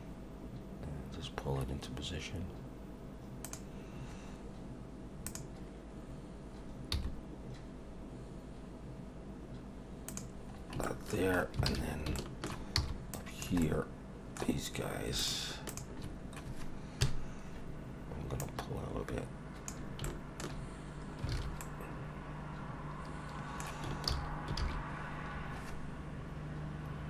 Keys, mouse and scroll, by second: 5.3 click, 6.9 g, 10.5 scroll down 3, 10.8 shift+middle click, 11.3 scroll up 3, 11.7 alt+a, 12.1 shift+middle click, 12.8 b, 13.6 middle click, 14.0 scroll up 3, 15.2 shift+click, 15.7 shift+click, 17.0 KP_1, 18.4 click, 20.2 shift+middle click, 20.9-21.2 scroll down 2, 21.3 alt+a, 21.6 middle click, 24.1 ctrl+z, 24.6 ctrl+z.